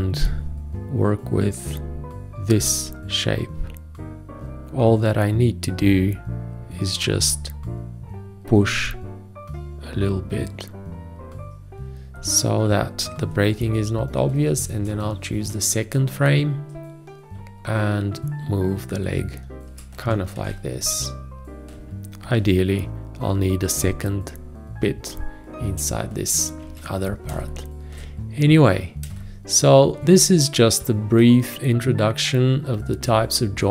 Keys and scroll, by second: 14.5 shift+., 16.7 g, 20.3 ctrl+a, 22.4 v, 26.6 ctrl+a, 27.3 space, 31.1 space.